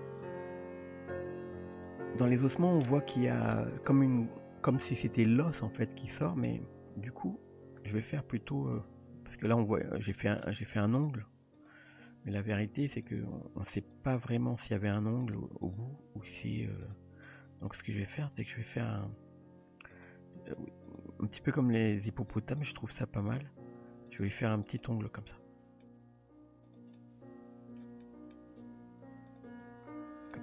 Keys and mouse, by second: 0.2 click, 0.8 g, 1.9 r, 8.5-9.5 middle drag, 10.2 middle drag, 11.0 click, 11.5 click, 13.1 click, 13.9 drag, 14.8 g, 15.7 click, 16.0 g, 17.3 click, 17.7 click, 18.3 g, 21.5 g, 22.7 click, 23.3 g, 24.8-25.9 middle drag, 27.0-27.8 middle drag, 28.1 middle click, 28.6 g, 29.7 Tab, 30.3-30.4 middle drag.